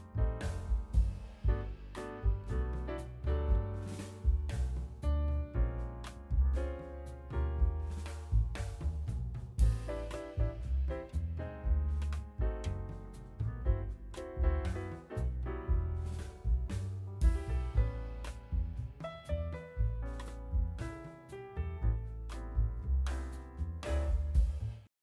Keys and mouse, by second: 1.0 ctrl+r, 1.9 ctrl+r, 3.7 click, 4.1-13.1 middle drag, 4.4 KP_3, 4.8 ctrl+r, 6.4 ctrl+r, 7.9 ctrl+r, 9.5 ctrl+r, 12.1 ctrl+r, 13.1 ctrl+click, 13.3 ctrl+r, 13.3-15.3 ctrl+middle drag, 15.2 ctrl+r, 16.3 ctrl+r, 18.4 ctrl+r, 18.8-20.0 middle drag, 20.0 click, 20.3-22.2 shift+middle drag, 22.2 shift+middle click, 22.5 ctrl+middle click, 22.7 ctrl+r, 23.4 click, 23.5 shift+middle click, 24.8 middle click.